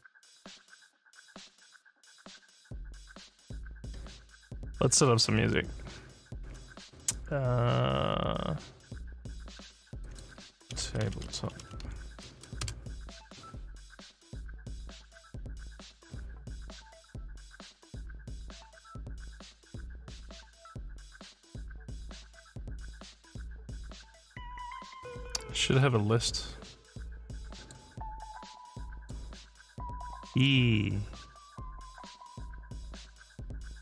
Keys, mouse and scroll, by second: 5.0 click, 10.0 click, 10.5-11.3 typing, 27.5 click, 28.9 click, 30.3 click.